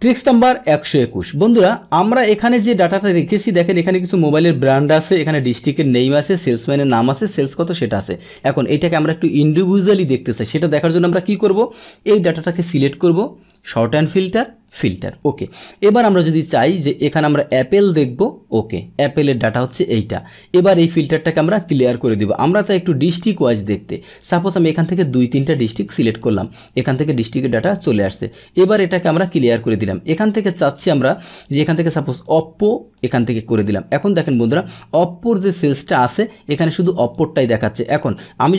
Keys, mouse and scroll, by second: 1.7 click, 3.8 click, 5.5 click, 6.5 click, 7.2 click, 11.3-13.7 drag, 14.7 click, 16.0 click, 17.1-18.2 drag, 20.5 click, 21.6 click, 22.9 click, 24.1 click, 25.0 click, 25.3 click, 26.2 click, 28.3 click, 29.1 click, 31.3 click, 32.2 click, 32.9 click, 37.0 click, 37.9 click.